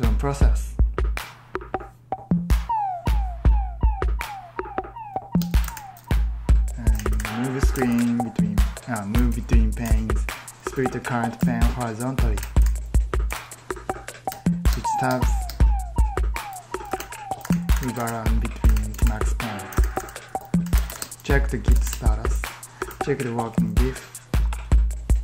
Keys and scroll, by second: 5.3 super+Tab, 5.3-13.2 typing, 11.3 Return, 14.2 Tab, 14.5 Tab, 14.9 Tab, 15.3 Tab, 16.7 ctrl+t, 17.3 ctrl+t, 17.6 ctrl+t, 17.9 ctrl+t, 18.6 ctrl+t, 19.6 ctrl+t, 20.3-23.6 typing, 22.3 ctrl+d.